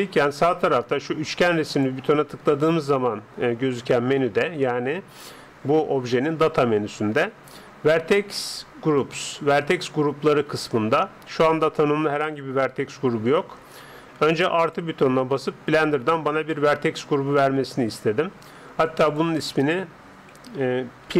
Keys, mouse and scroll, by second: 1.7-3.5 drag, 14.6-16.3 drag, 18.9-20.9 drag.